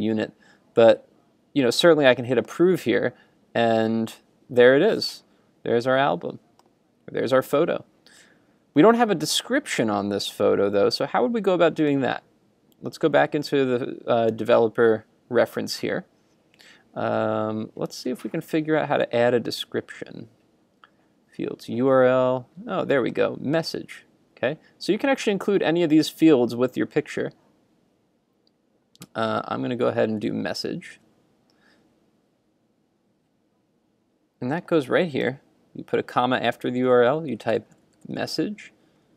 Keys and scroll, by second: 30.3 super+Tab.